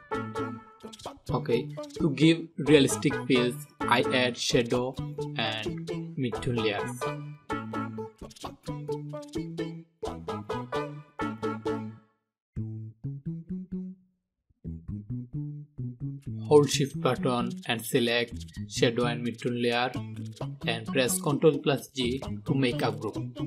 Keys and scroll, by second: 18.7 ctrl+g.